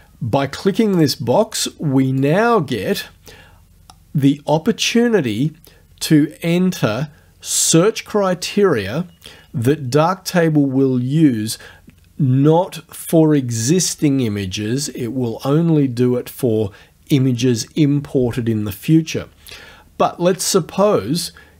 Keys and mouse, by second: 1.0 click, 2.2 click.